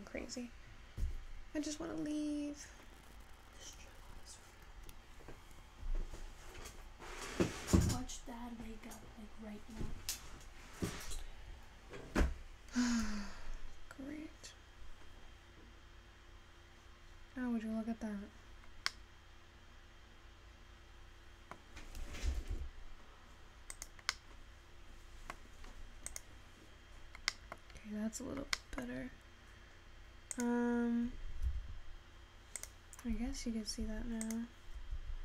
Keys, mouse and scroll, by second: 18.9-22.2 middle drag, 24.2-26.5 middle drag, 27.5-29.2 middle drag, 32.8 click, 34.4-35.2 drag.